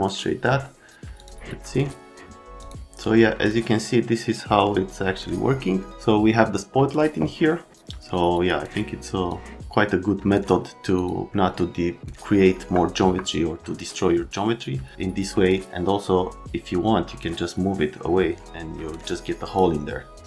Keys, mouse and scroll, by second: 1.1 click, 2.6 click, 8.5 click, 12.5 F3, 12.9 F3, 16.8-19.5 drag.